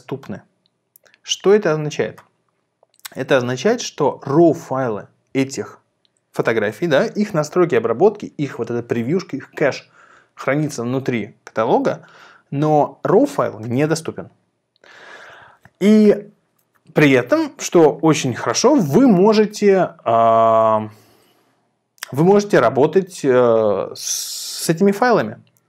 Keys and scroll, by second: 4.0 Down, 5.2 Down, 19.6 Up, 20.6 Up, 21.0 Down.